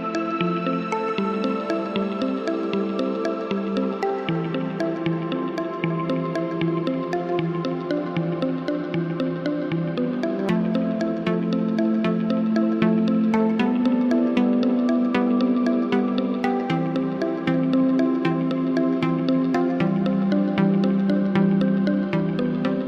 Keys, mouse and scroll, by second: 0.5-2.0 drag, 2.7-3.8 drag, 4.9-5.8 drag, 6.5-8.6 drag, 8.9 click, 9.1-10.1 drag, 10.8-12.5 drag, 13.3 click, 13.4 click, 15.3 click, 15.9 click, 18.1-19.8 drag, 21.9-22.8 drag.